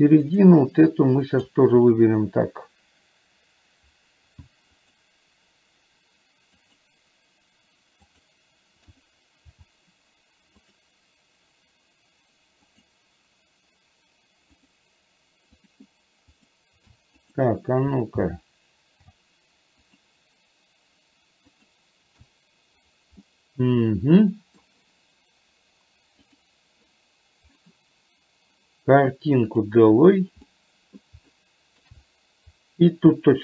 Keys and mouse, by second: 0.2 click, 1.4 click, 5.0 click, 6.6 click, 10.6 click, 12.7 click, 14.7 click, 16.4 click, 19.9 click, 21.6 click, 23.2-24.7 middle drag, 29.6 click, 30.6 middle click, 31.5 shift+middle click.